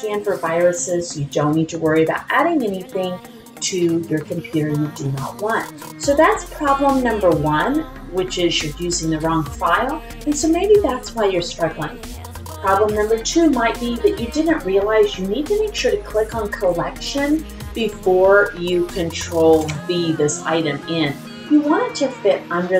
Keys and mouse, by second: 11.2 click, 14.3 click.